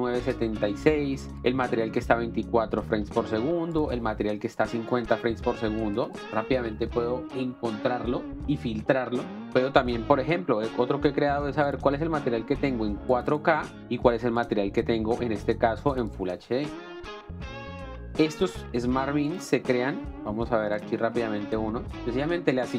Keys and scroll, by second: 13.8 space, 18.1 space.